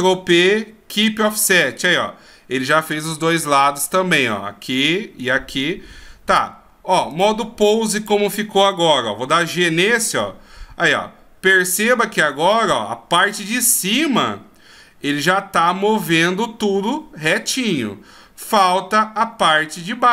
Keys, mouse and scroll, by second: 7.1 click, 8.1 click, 9.0 g.